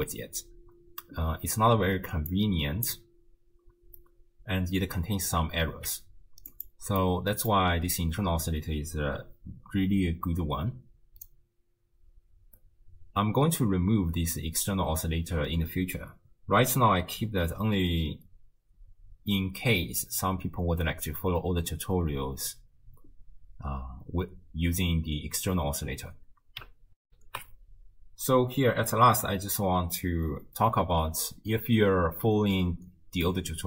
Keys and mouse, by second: 2.3-3.0 drag, 3.0 right click, 5.7 x, 6.5 right click, 7.0 click, 27.0 ctrl+alt+shift+w, 27.4 ctrl+alt+shift+q.